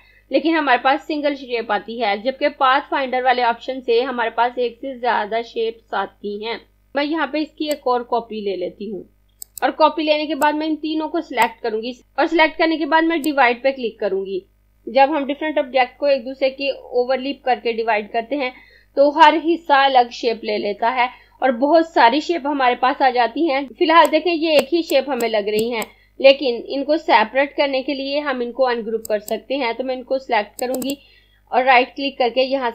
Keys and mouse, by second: 7.8 click, 9.5 click, 23.7 click, 28.9 click, 30.7 right click.